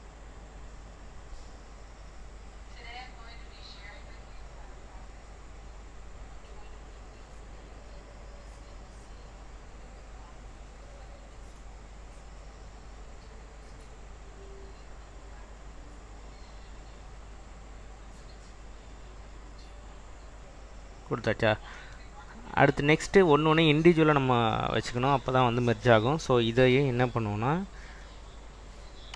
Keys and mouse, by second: 1.1-1.6 drag, 3.1 click, 5.5 click, 7.9-8.4 drag, 9.1-9.9 drag, 11.2 click, 15.5-16.0 drag, 16.6-17.1 drag, 19.1-20.1 drag, 26.7 /, 28.1 click.